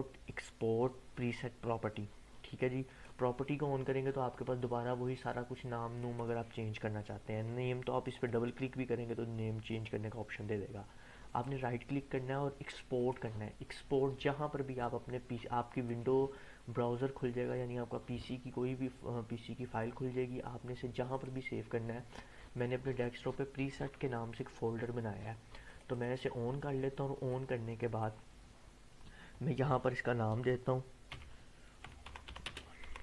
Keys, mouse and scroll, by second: 2.8 click, 5.9 click, 11.3 right click, 12.9 click, 15.8-19.8 drag, 25.6-28.2 drag, 31.1-33.0 typing.